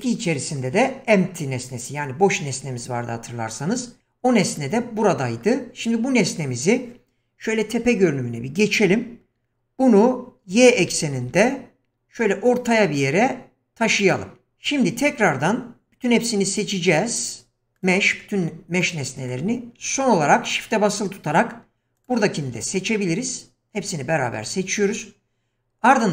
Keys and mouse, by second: 7.8 KP_7, 10.7 g, 16.9 q, 18.8-19.3 middle drag, 22.9-24.2 middle drag.